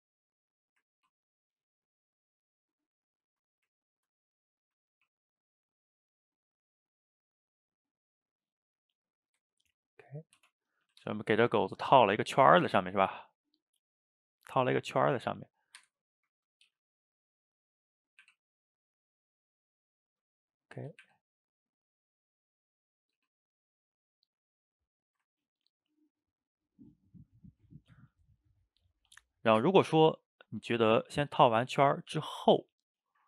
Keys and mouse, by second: 0.7 click, 1.0 ctrl+t, 2.3-3.2 middle drag, 3.2 ctrl+z, 3.5 ctrl+z, 3.8 ctrl+right click, 4.3 middle click, 4.9 ctrl+t, 7.8-10.4 middle drag, 10.4 Tab, 10.8 a, 10.9 a, 11.1-12.5 ctrl+middle drag, 12.5 shift+right click, 12.8-13.4 ctrl+middle drag, 13.4 click, 13.6-15.0 middle drag, 15.0 s, 15.8 Escape, 15.9-16.7 middle drag, 16.7 g, 18.3 r, 19.5-21.1 middle drag, 21.1 r, 22.5-23.2 middle drag, 23.2 r, 24.9 middle drag, 25.1 shift+right click, 25.3-28.6 ctrl+shift+middle drag, 29.7-31.3 middle drag, 31.3 a, 31.5 a, 31.6-33.2 middle drag, 33.2 shift+right click.